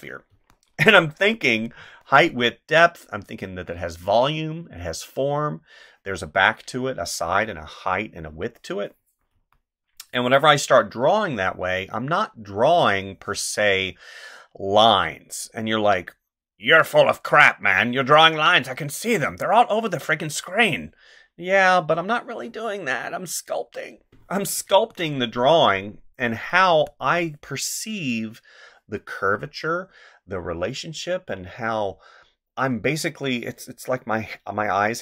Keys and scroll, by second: 0.3 space, 1.8 space, 9.3 space, 24.7 space, 26.7 space.